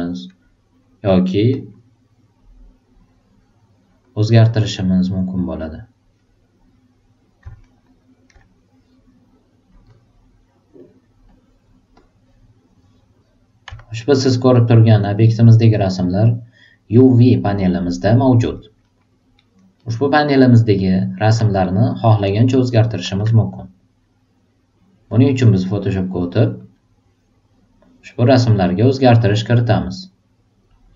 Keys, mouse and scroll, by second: 1.5 super+click, 2.9 super+click, 4.0-5.6 super+drag, 7.6 alt+super+middle click, 9.7 super+click, 10.8 super+click, 11.2 super+click, 11.9 super+click, 13.1 super+click, 14.0 alt+right click, 14.4 alt+click, 15.2 alt+right click, 15.6 alt+click, 17.8 alt+right click, 18.8 alt+middle click, 19.3 alt+super+right click, 19.7 alt+super+middle click, 20.8 alt+super+right click, 21.2 alt+super+middle click, 21.6 alt+super+right click, 22.3 alt+super+click, 25.1 click, 26.5 click, 28.3 click, 29.2 click, 30.7 click.